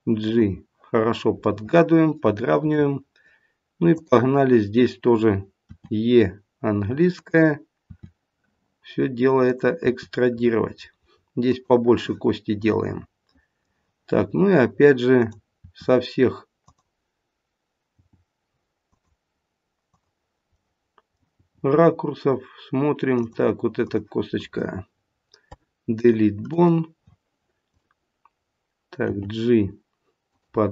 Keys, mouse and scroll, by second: 1.4 middle click, 2.3 middle click, 3.8 click, 5.7 e, 7.8 e, 12.5 middle click, 12.5 e, 13.2 middle click, 15.1 click, 15.5 e, 17.9 g, 19.8 click, 20.5 middle click, 21.3 middle click, 21.3 g, 23.7 click, 25.4 Delete, 27.6 click, 29.0 g.